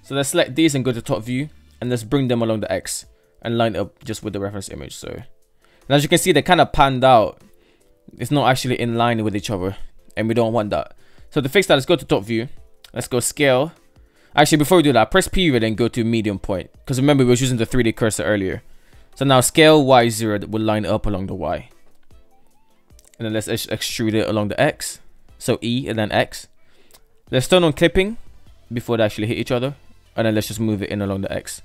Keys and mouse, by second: 0.3 Tab, 0.7-1.1 shift+middle drag, 3.6 g, 6.3 shift+middle click, 7.1 middle click, 8.7-9.7 middle drag, 10.3 KP_7, 13.1 Tab, 13.1 KP_7, 16.9 s, 21.2 shift+middle drag, 23.5 e, 26.9 click, 28.9 g, 30.6-31.2 middle drag, 31.3 middle click.